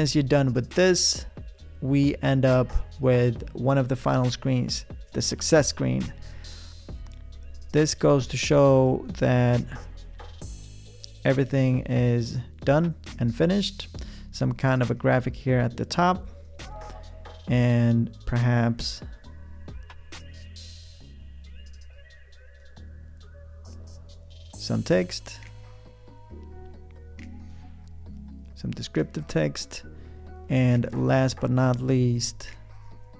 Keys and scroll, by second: 7.4 o, 18.5 p, 30.6 a, 31.7 v.